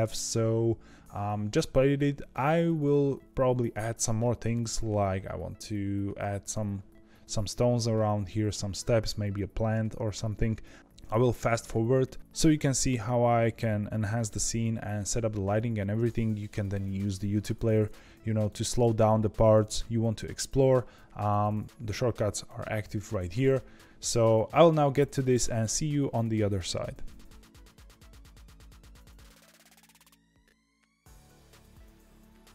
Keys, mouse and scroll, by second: 27.8 scroll down 1, 27.9 shift+a, 28.4 scroll up 1, 28.5 Tab, 29.0 KP_1, 29.1 scroll up 1, 29.2 g, 29.9 scroll down 1, 30.1 middle click, 30.3-32.5 typing, 31.6 middle click.